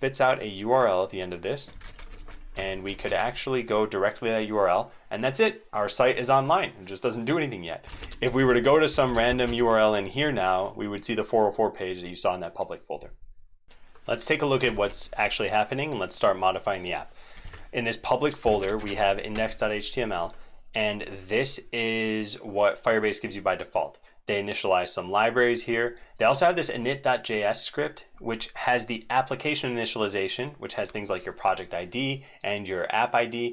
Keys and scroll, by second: 1.7 ctrl+c, 1.9 super+1, 2.1 super+1, 2.5 super+1, 3.0 ctrl+v, 7.8 alt+d, 13.8 alt+super+x, 13.8 ctrl+c, 13.8 super+2, 14.6 alt+Caps_Lock, 14.7 alt+super+x.